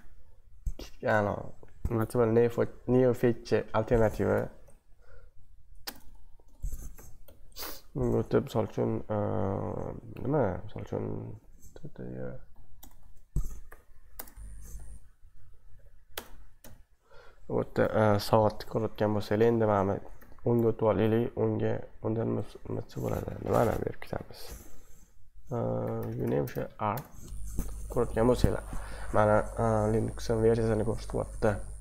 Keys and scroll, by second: 4.3 ctrl+b, 4.6 Up, 5.2 Up, 5.8 BackSpace, 6.0 BackSpace, 6.1 BackSpace, 6.2 BackSpace, 6.9 ctrl+b, 7.2 Up, 11.6-16.6 typing, 20.2 ctrl+b, 20.5 Right, 25.7-27.1 typing.